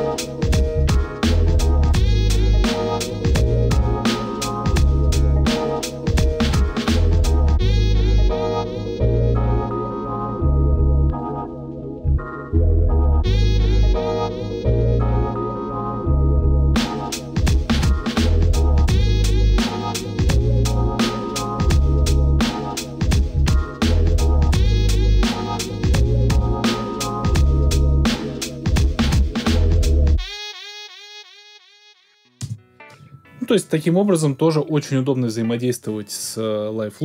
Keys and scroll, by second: 32.4 space.